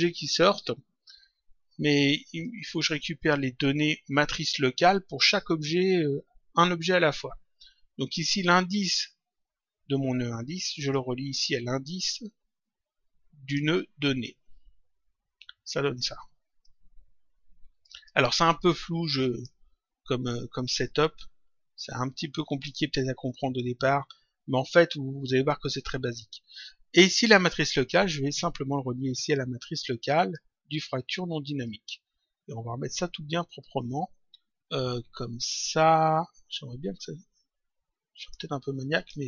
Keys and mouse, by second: 2.4 click, 10.8 click, 14.2 click, 16.5 click, 20.7 click, 27.8 click, 31.6 click, 38.8 click.